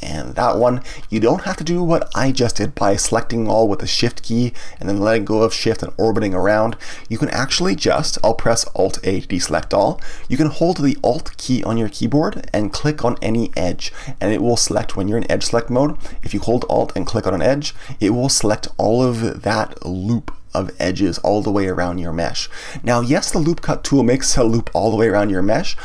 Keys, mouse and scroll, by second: 0.5 shift+click, 4.2-9.5 middle drag, 9.5 alt+a, 17.7 alt+click, 19.8-22.8 middle drag, 24.4-25.8 middle drag.